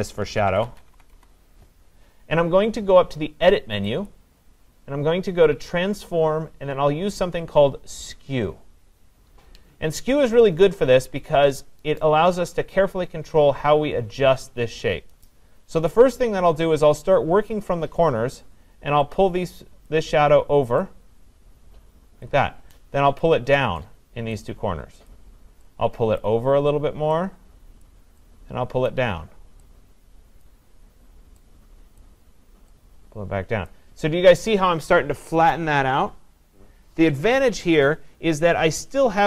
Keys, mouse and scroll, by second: 0.2-0.9 typing, 1.1 Return, 4.1 click, 13.0 click, 19.9 click, 22.2 click, 23.2 click, 25.1 click, 26.2 click, 27.9 click, 28.9 click.